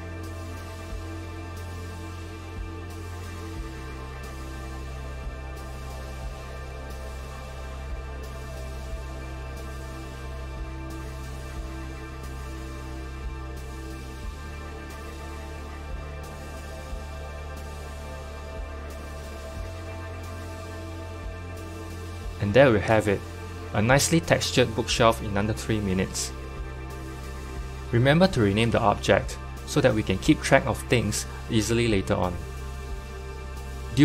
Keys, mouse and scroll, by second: 2.5 click, 3.4 g, 12.8-15.8 middle drag, 15.8 Tab, 17.2 /, 17.9 click, 18.2-18.7 scroll up 6, 18.8-23.1 middle drag, 23.1-29.2 drag, 29.4-34.0 drag.